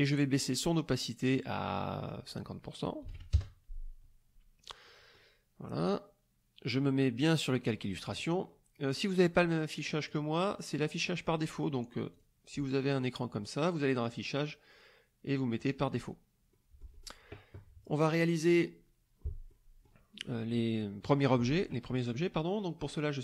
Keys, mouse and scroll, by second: 0.0 click, 2.0 click, 3.0 KP_5, 3.1 KP_0, 3.3 KP_Enter, 4.8 click, 7.5 click, 10.1 click, 12.1 click, 14.0 click, 15.6 click, 16.5 middle click, 17.6 middle click, 19.5 middle click.